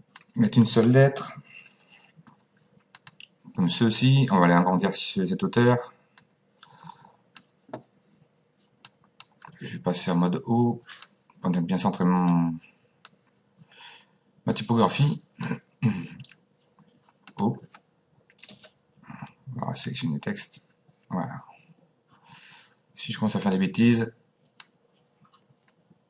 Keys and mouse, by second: 1.6 s, 2.9 click, 6.1 click, 8.8 click, 10.9 click, 12.3 click, 14.9 click, 17.3 click, 18.5 Delete, 19.8 click, 23.4 click, 24.6 click.